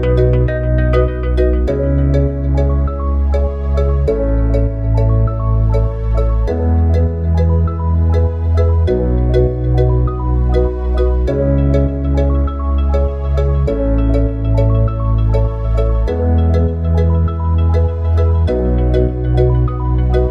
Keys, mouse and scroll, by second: 1.9 click, 5.4 click, 6.4 s, 8.3 click, 17.5-18.8 drag.